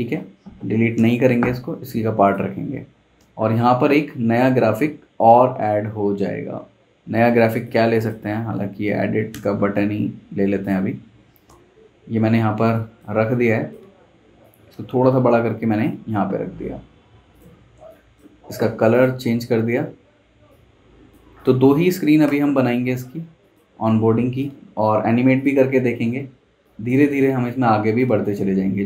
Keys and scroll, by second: 0.9 Left, 3.2 super+Tab, 8.8 super+c, 9.3 super+Tab, 11.4 super+v, 21.5 z, 22.2 v.